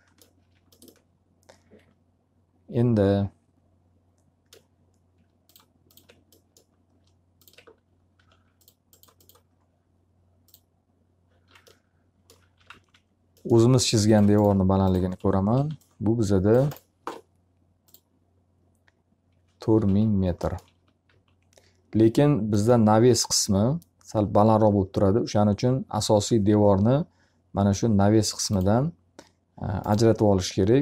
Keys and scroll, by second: 0.3 q, 7.7 d, 12.1 f, 12.6 z, 15.1 s, 19.8 alt+r, 20.7 t, 21.0 z.